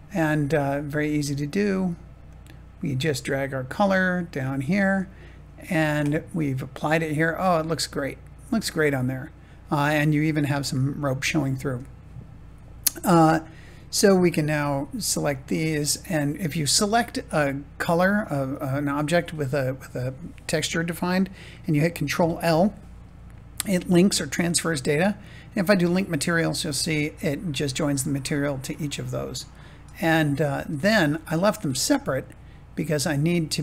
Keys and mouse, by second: 7.6-9.8 middle drag, 11.7 shift+middle click, 15.2 shift+click, 21.9 ctrl+l, 26.2 middle click, 27.8-29.5 middle drag, 30.1 click, 30.6 Tab, 31.7 middle click, 32.7-33.6 middle drag.